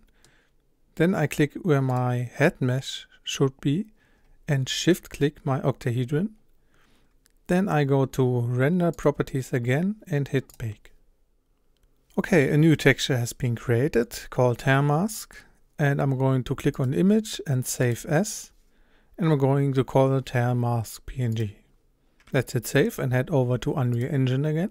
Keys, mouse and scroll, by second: 2.0 click, 4.9 shift+click, 18.0-21.5 drag.